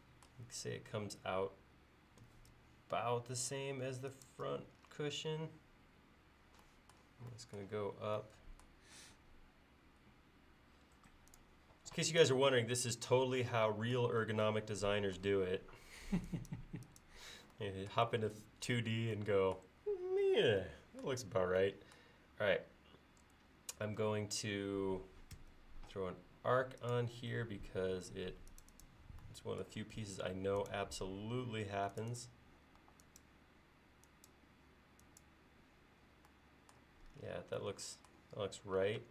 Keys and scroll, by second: 12.6 e, 25.5 a, 30.2 a, 32.9 e, 39.0 space.